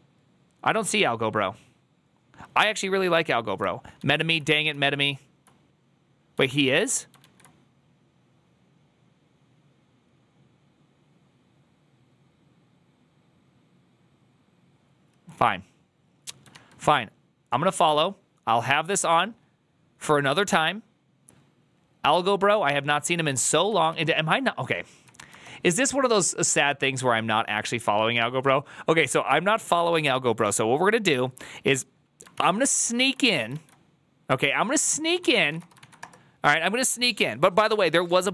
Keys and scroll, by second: 3.9 alt+[, 4.0 alt+{, 4.6 alt+[, 7.1 alt+[, 32.2 ctrl+c, 32.8 alt+{, 33.4 alt+[, 34.8-36.0 typing.